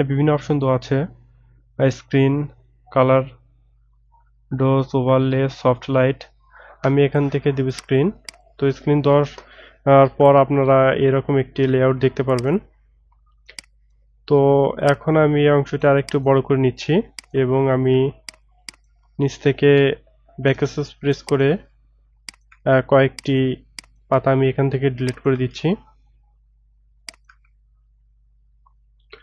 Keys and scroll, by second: 20.6 BackSpace.